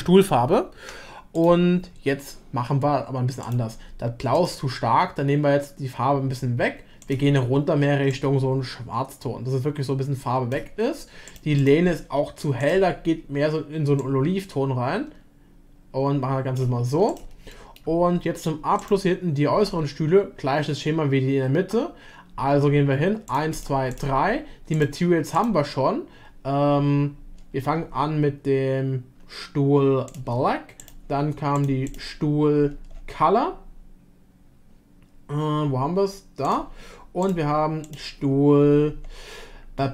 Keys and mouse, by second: 3.4 click, 4.3 click, 11.3 click, 11.6-14.0 drag, 17.5 middle drag, 18.8 click, 23.3 click, 23.5 click, 24.7 click, 25.6-30.3 drag, 30.8 click, 31.7-39.9 drag.